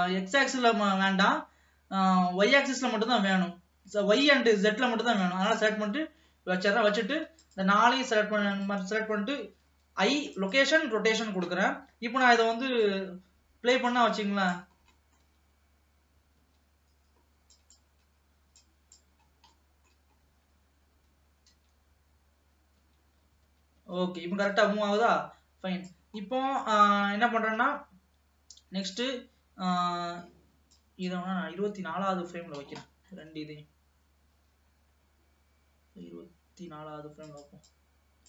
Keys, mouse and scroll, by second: 6.2-6.5 scroll down 1, 6.5-7.6 middle drag, 7.6 shift+click, 8.6 shift+click, 12.9-14.9 drag, 14.9 scroll down 3, 15.1 middle click, 15.5 space, 16.6 space, 17.7-19.5 drag, 19.5 scroll up 2, 19.7 middle click, 20.3-21.6 scroll up 2, 21.6 space, 22.9 space, 24.0 space, 24.7-26.4 drag, 26.4-29.0 scroll up 2, 29.0 click, 30.9 click, 31.5 scroll up 2, 31.9 middle click, 32.5-33.0 scroll up 2, 33.0-34.7 middle drag, 34.7 g, 37.8-38.2 drag.